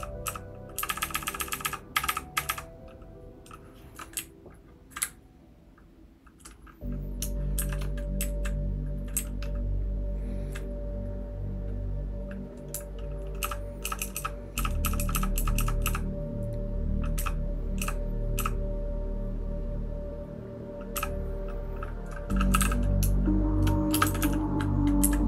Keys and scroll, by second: 0.0-2.5 typing, 4.1-4.9 Down, 5.0-6.3 Right, 7.5 $, 8.2 Down, 9.1-10.4 Down, 13.4-15.8 typing, 17.1 }, 17.8 }, 18.3 }, 20.9 }, 22.2-24.2 typing, 25.0 Up.